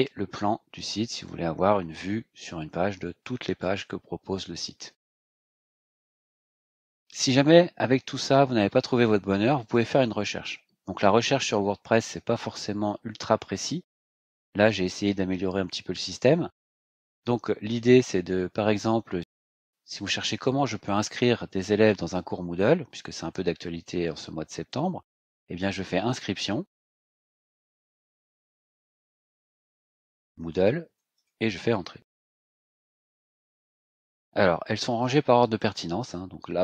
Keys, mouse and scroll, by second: 1.1 click, 2.2-4.8 scroll down 12, 6.0 click, 9.6 click, 24.8-31.7 typing, 32.2 Return, 35.5-35.8 scroll down 2.